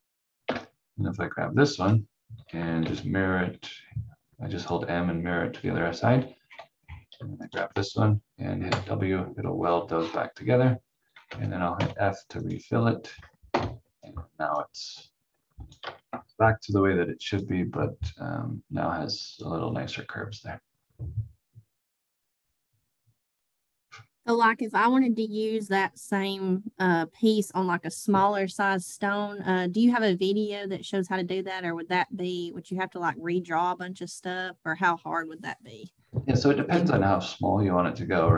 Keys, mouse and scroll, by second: 0.4 Delete, 1.8 click, 2.8 m, 4.6 click, 5.5 scroll up 1, 7.7 v, 8.6 w, 9.5-10.1 scroll down 1, 11.3 v, 11.7 f, 12.4 click, 13.5 F4, 14.6 click, 16.1 shift+F2, 17.3 click, 35.5 click.